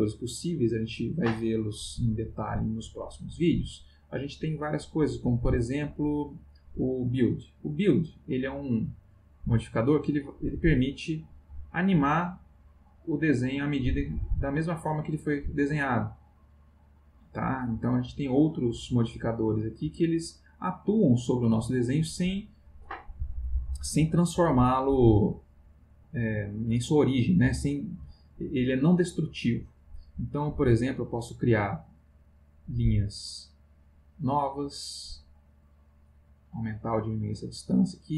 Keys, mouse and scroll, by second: 7.1 click, 9.5-18.5 drag, 19.6 click, 20.5 click, 30.8 click, 32.8-35.1 drag, 35.5-38.1 drag.